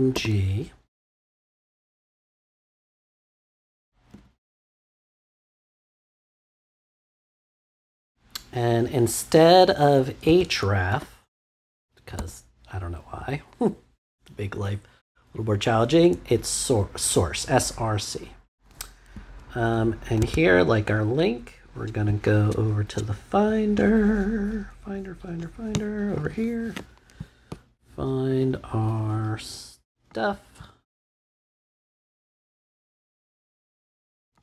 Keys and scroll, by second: 0.1 g, 4.1 shift+., 5.6 Left, 6.9 space, 10.2 s, 10.9 r, 12.1 c, 14.5 =, 20.2 super+Tab.